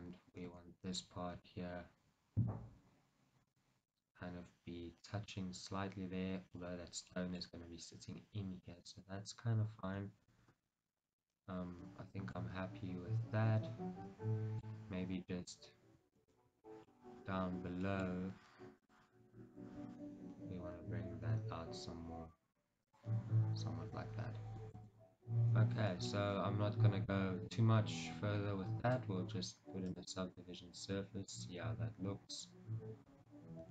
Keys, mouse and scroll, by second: 0.6 shift+z, 1.5 g, 3.7 click, 4.0-10.1 middle drag, 12.5-14.9 middle drag, 14.9-15.7 scroll, 16.5 shift+middle click, 19.7-23.0 middle drag, 25.1 scroll, 25.5 Tab, 26.0-29.0 shift+middle drag, 29.0-33.2 drag, 33.2-33.7 shift+middle drag.